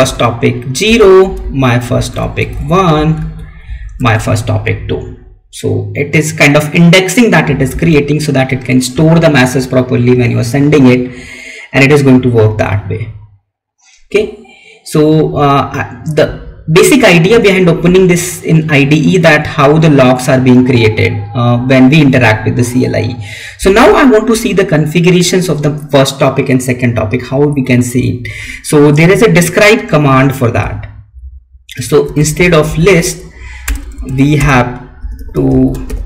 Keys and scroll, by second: 0.7 Left, 1.1 Down, 1.9 Up, 2.1 Right, 2.6 Down, 2.8 Up, 3.5 Down, 4.2 Right, 8.1 Left, 29.2 Up, 30.5 Left, 32.9 Right.